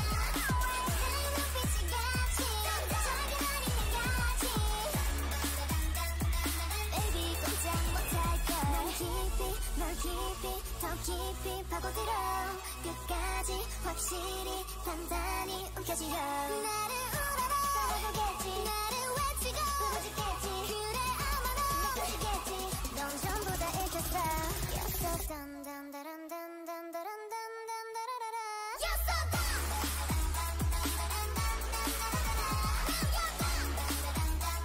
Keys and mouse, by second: 1.6-4.1 drag, 2.9 ctrl+e, 4.1 a, 5.6 a, 6.3 shift+e, 6.7 shift+e, 7.5 Tab, 14.2 middle click, 15.8 Tab, 16.6 a, 17.4 ctrl+e, 18.2 shift+e, 20.4 ctrl+e, 21.8-23.0 drag, 22.1 shift+e, 23.0 shift+e, 23.9 ctrl+z, 24.3 ctrl+z, 24.8 middle click, 25.1 a, 25.6 middle click, 26.3 middle click, 30.5 a, 30.7 a, 30.9 a, 31.3 u, 32.3 click, 32.6 shift+e, 33.5 a, 33.8 a, 34.1 u.